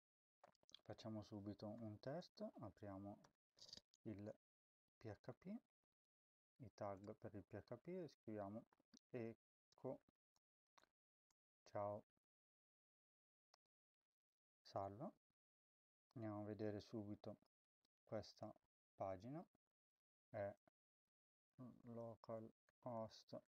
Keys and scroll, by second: 1.4-3.1 typing, 3.5 Return, 4.3-5.2 typing, 6.8 BackSpace, 7.5 Up, 8.2 Tab, 8.3-13.0 typing, 13.4 ctrl+s, 21.3-23.5 typing.